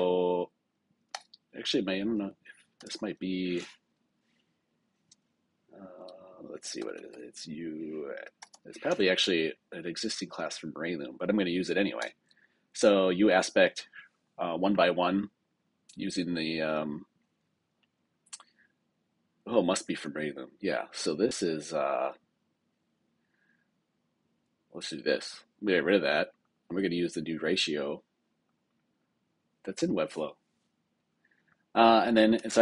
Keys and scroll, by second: 9.2 Down, 11.9 Return, 32.3 super+k.